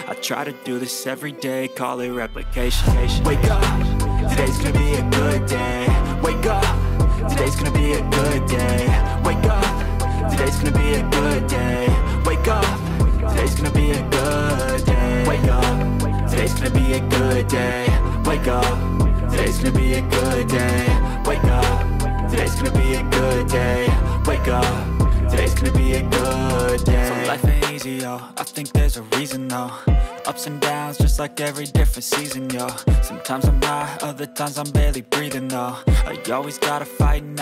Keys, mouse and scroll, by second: 0.3 click, 1.9 click, 7.7 click, 8.9 click, 11.6 Tab, 12.0 Tab, 12.1 right click, 12.3 Tab, 13.6 click, 14.5 click, 15.4 alt+shift+click, 15.8 alt+shift+click, 17.7 click, 20.2 click, 21.1 click, 21.7 Tab, 22.6 click, 23.4 Tab, 27.0 middle click, 27.4 alt+shift+click, 27.8 alt+shift+middle click, 28.1 alt+shift+click, 28.4 alt+shift+click, 28.7 alt+shift+click, 28.9 alt+shift+click, 29.4 shift+middle click, 30.2 click, 30.5 Tab, 31.8 click, 32.4 middle click, 34.8 middle click, 36.9 click.